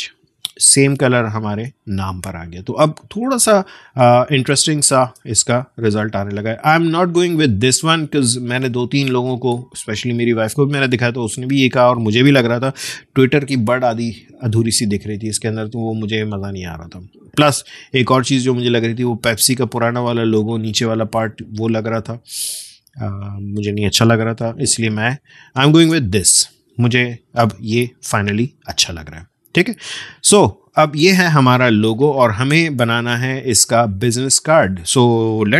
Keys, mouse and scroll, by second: 0.2 space, 2.2-2.9 alt+scroll down 1, 3.6 space, 3.7 click, 4.1 space, 7.0 alt+scroll up 1, 8.8 space, 9.0 click, 9.4 space, 16.2-17.0 scroll down 2, 17.2-18.0 alt+scroll up 1, 18.9 click, 19.0 space, 24.0-24.8 alt+scroll down 1, 25.1 space, 25.4 click, 25.6 space, 26.3-26.7 alt+scroll up 1, 26.7-27.6 alt+scroll down 1, 27.6 space, 27.8 click, 28.2 space, 31.1-35.5 drag.